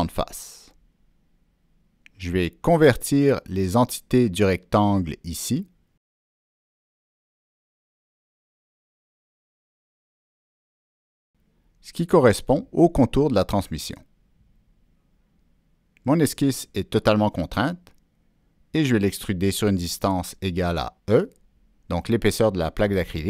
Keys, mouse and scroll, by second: 0.8 click, 4.3 click, 5.4 ctrl+click, 6.4 ctrl+click, 7.0 ctrl+click, 7.6 ctrl+click, 8.9 click, 20.3 click, 23.2 Down.